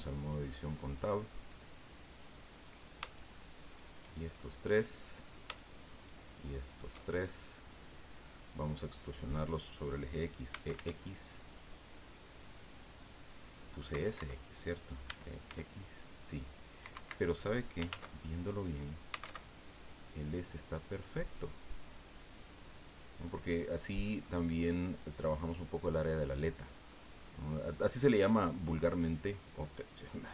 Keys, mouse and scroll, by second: 0.0 click, 0.4 middle click, 2.5 right click, 3.1 shift+right click, 3.7 shift+right click, 4.4 shift+middle click, 5.5 shift+right click, 6.0 shift+right click, 6.7 shift+right click, 7.1 shift+scroll down 2, 7.4 shift+click, 7.4-9.7 middle drag, 10.3-11.3 typing, 13.9 Escape, 15.1 e, 15.5 x, 16.9 Escape, 17.9 ctrl+z, 18.9-19.7 typing, 22.9 click, 23.3-24.8 middle drag, 26.1 click, 27.1-27.6 scroll up 1, 27.6-28.6 middle drag, 28.8 right click.